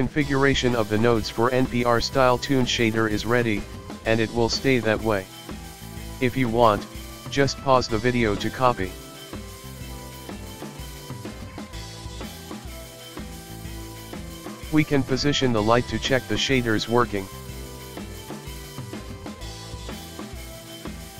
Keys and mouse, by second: 6.3-9.3 drag, 9.3-12.0 ctrl+middle drag, 12.3 click, 12.4 ctrl+middle click, 12.7 drag, 13.1 ctrl+middle click, 13.6 ctrl+middle click, 13.7 click, 13.7 ctrl+middle click, 13.9 shift+a, 14.4 Escape, 14.5 Tab, 14.7 shift+a, 15.2 ctrl+middle click, 15.6 ctrl+middle click, 15.8-18.7 typing, 15.9 middle click, 16.1 ctrl+middle click, 16.4 click, 16.7 click, 17.0 click, 17.2 ctrl+middle click, 17.7-18.2 ctrl+middle drag, 18.3-18.7 ctrl+shift+middle drag, 18.9 right click, 19.0 right click, 19.2 middle click, 20.0 click, 20.5-21.1 ctrl+middle drag.